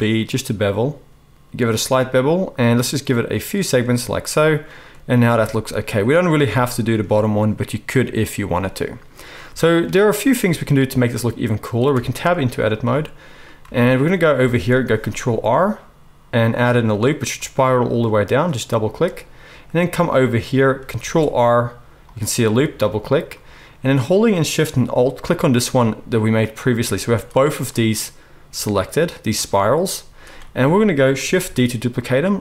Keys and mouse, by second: 5.3 Tab, 6.4-6.9 shift+drag, 6.9-9.4 middle drag, 9.4-9.8 shift+drag, 9.8-12.8 middle drag, 11.9 Tab, 12.8 shift+click, 13.3-17.3 shift+right drag, 14.3 alt+a, 15.0 ctrl+r, 17.3 click, 17.5-25.5 right drag, 20.9 ctrl+r, 25.5 alt+shift+middle click, 25.7-31.0 alt+right drag, 27.0 z, 30.0 z, 31.0-32.4 shift+drag, 31.4 shift+d.